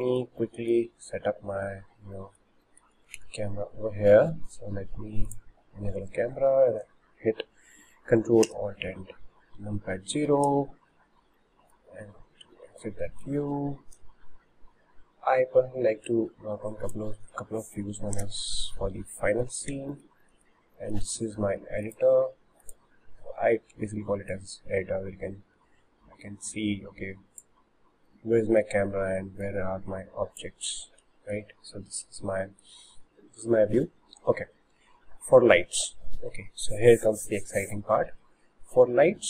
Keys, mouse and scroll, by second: 1.1-2.0 scroll up 5, 2.2-3.2 shift+middle drag, 3.2 shift+a, 8.5 ctrl+alt+KP_0, 11.4-12.0 middle drag, 12.0-12.5 scroll down 7, 12.8-16.2 shift+middle drag, 16.2-18.2 drag, 18.2 KP_0, 20.3-22.0 middle drag, 22.0-24.4 drag, 29.5 click, 32.2-33.3 middle drag, 33.3-36.4 scroll up 2.